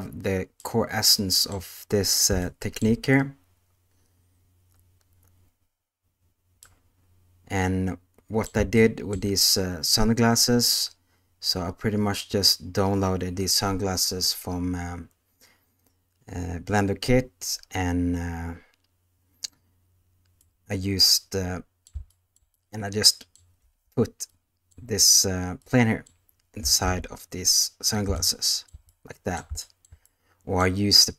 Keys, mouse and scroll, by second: 0.6-1.5 middle drag, 6.6-8.4 middle drag, 8.7-15.6 shift+middle drag, 20.4-21.8 middle drag, 22.5-23.3 middle drag, 23.6 space, 24.2-24.7 middle drag, 25.5-26.0 middle drag, 26.6 s, 28.2-29.3 shift+middle drag, 29.6-30.7 shift+middle drag.